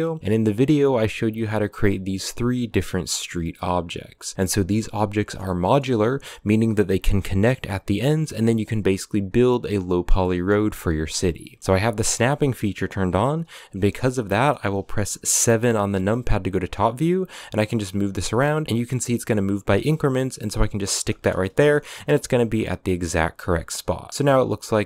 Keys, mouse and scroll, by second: 0.2-0.7 scroll up 7, 0.2 right click, 0.4 middle click, 0.6 a, 0.7 shift+middle click, 1.0 right click, 1.4 a, 1.4 shift+middle click, 1.6 right click, 1.6 scroll up 2, 1.8 scroll down 2, 1.9 shift+middle click, 2.1 right click, 2.6 right drag, 3.2 right click, 3.8 right click, 4.1 scroll down 2, 4.3-5.2 middle drag, 5.2-5.7 scroll up 4, 5.4 middle drag, 7.8 scroll down 5, 10.0-11.6 middle drag, 11.8 click, 14.1-15.3 middle drag, 15.3 KP_7, 16.0 scroll up 3, 16.9 g, 21.2 shift+middle drag, 21.4-21.8 scroll up 9, 22.0 a, 22.7-23.1 scroll down 8, 23.3-24.1 middle drag, 24.4 right click, 24.7 right click.